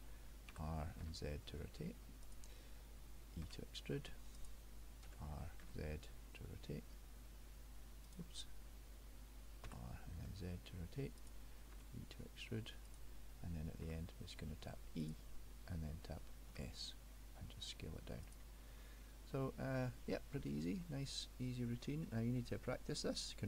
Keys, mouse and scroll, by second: 0.6 r, 3.5 e, 5.1 s, 9.8 r, 11.9 e, 14.0 e, 16.6 s, 18.9 middle click, 20.3 scroll down 1, 20.5 middle click, 22.0 middle click.